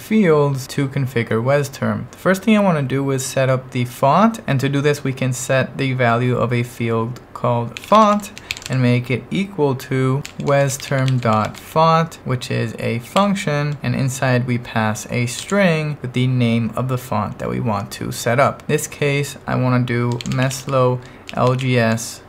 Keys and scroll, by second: 7.5-8.7 typing, 9.9-12.1 typing, 13.2 shift+9, 15.5 shift+', 19.9-22.2 typing.